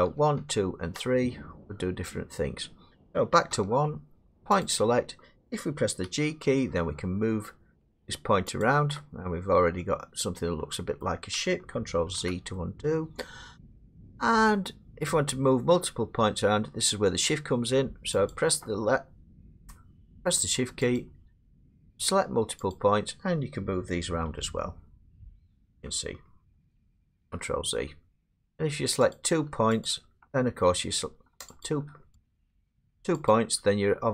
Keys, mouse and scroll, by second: 0.1-0.8 typing, 3.5 1, 4.6 click, 6.0 g, 8.6 click, 11.0 middle click, 12.1 ctrl+z, 13.9 middle click, 18.3 click, 21.0 shift+click, 22.7 click, 24.3 g, 25.5 click, 27.2 ctrl+z, 28.2 shift+click, 29.1 click, 29.9 shift+click, 31.7 click, 32.3 click, 33.3 shift+click.